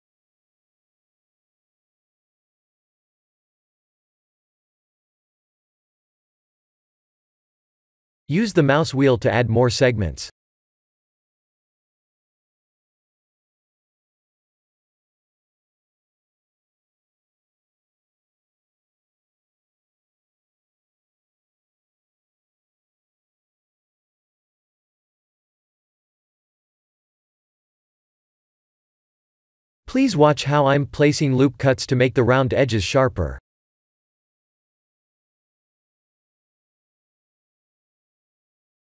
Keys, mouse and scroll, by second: 0.4 click, 1.9 KP_7, 4.5 ctrl+b, 15.1 Tab, 15.4 middle click, 19.4 middle click, 20.2 click, 20.8 s, 24.9 middle click, 26.4 Tab, 26.7 middle click, 27.2 Tab, 27.4 middle click, 27.9 ctrl+3, 28.3 middle click, 29.2 Tab, 30.2 ctrl+r, 33.2 click, 37.0 middle click, 38.3 ctrl+r.